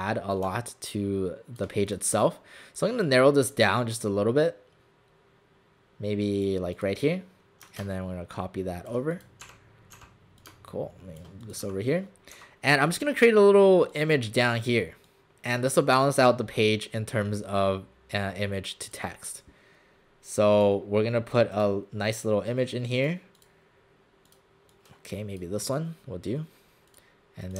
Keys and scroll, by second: 9.5 alt+shift+w, 10.0 alt+shift+w, 11.6 w, 12.4 w.